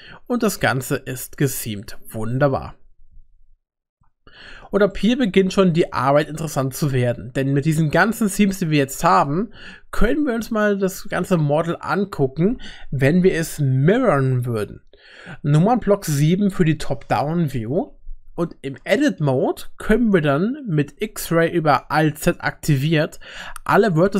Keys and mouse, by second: 5.0 middle click, 5.8 shift+middle click, 15.9 KP_7, 19.3 1, 22.3 alt+z.